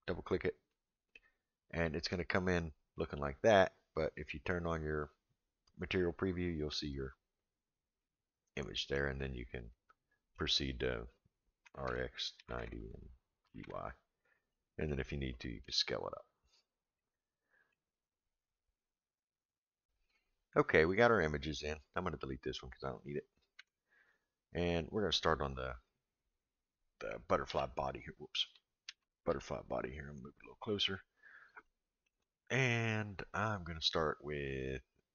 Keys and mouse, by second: 0.7-1.1 middle drag, 2.4-2.8 drag, 5.0 click, 8.0-8.9 middle drag, 9.7-10.4 middle drag, 11.6 r, 13.4 g, 14.5-14.9 middle drag, 15.6 s, 16.9 middle click, 22.1 click, 24.0 x, 25.9 click, 27.5 h, 28.8 ctrl+z, 29.3 g, 31.7-32.1 shift+middle drag.